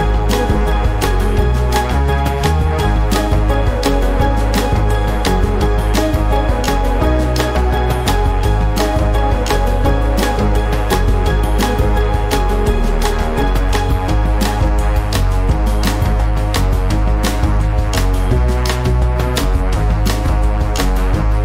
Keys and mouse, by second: 0.9 click, 1.3 click, 4.3 click, 5.4 click, 6.4 click, 7.8 ctrl+a, 7.9 click, 8.6 click, 9.1 click, 9.2 space, 9.3 click, 9.5 click, 9.7 ctrl+a, 10.2 click, 10.7 space, 10.8 ctrl+shift+click, 11.1 space, 11.3 space, 11.6 F12, 11.8 space, 12.3 ctrl+shift+f, 12.8 click, 13.0 click, 13.7 click, 13.9 g, 14.3 click, 14.6 click, 15.1 click, 15.3 click, 15.6 click, 15.9 click, 16.1 space, 16.1 F12, 16.3 space, 16.5 click, 17.3 click, 17.7 click, 18.0 click, 18.5 click, 18.7 click, 18.7 space, 19.2 click, 19.4 space, 19.7 click, 20.5 click, 20.7 space, 21.0 click, 21.2 ctrl+shift+click.